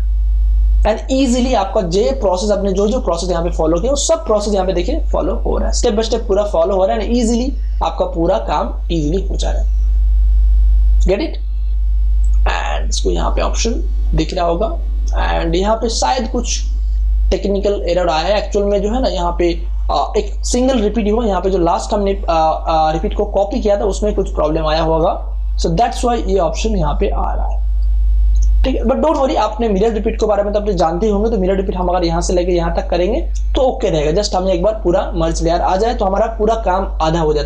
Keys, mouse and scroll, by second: 12.1 click, 15.1 space, 15.3-18.8 ctrl+drag, 18.8 ctrl+space, 19.1 ctrl+click, 19.3 ctrl+space, 21.5-27.7 drag, 28.6 space, 28.8 ctrl+click, 29.3 ctrl+alt+z, 31.6 click.